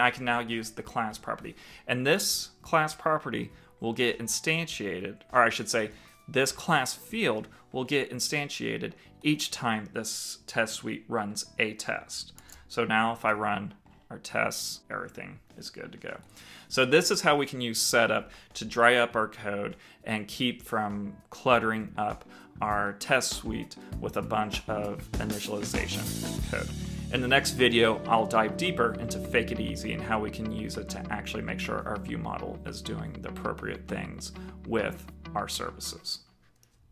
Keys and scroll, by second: 12.0 ctrl+shift+t.